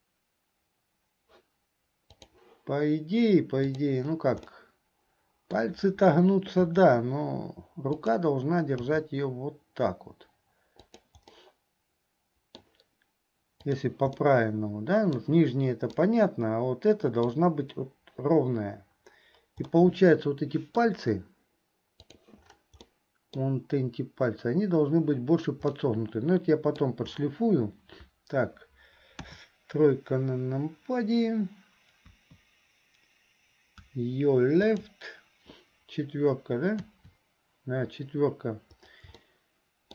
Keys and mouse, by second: 2.2 click, 3.7 click, 4.7-5.8 middle drag, 6.8 r, 11.5-12.9 middle drag, 13.7 click, 14.4-15.4 drag, 14.4-15.4 right drag, 16.2-17.2 drag, 16.2-17.2 right drag, 17.4 click, 17.4 right click, 19.9-21.0 drag, 19.9-21.0 right drag, 23.1 click, 23.1 right click, 26.0-27.0 drag, 26.0-27.0 right drag, 29.3 KP_3, 36.8 KP_4, 39.4 shift+middle click.